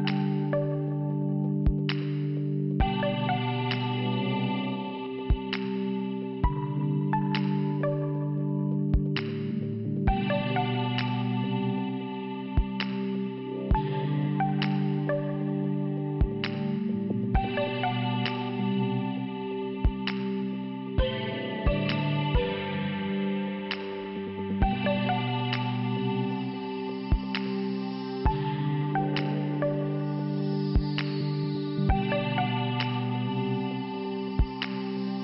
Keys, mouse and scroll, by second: 1.3 click, 4.6 click, 6.1 scroll up 1, 6.3-7.0 scroll down 4, 7.4 click, 8.5 click, 9.7 click, 9.7 click, 10.5 click, 12.3 middle click, 12.9 scroll up 1, 13.0-13.3 scroll down 2, 16.3 click, 20.7 shift+Return, 22.8 shift+Return, 23.8 click, 25.0 click, 26.1 click, 29.7 shift+Return, 33.4 shift+Return, 34.3 click, 35.1 click.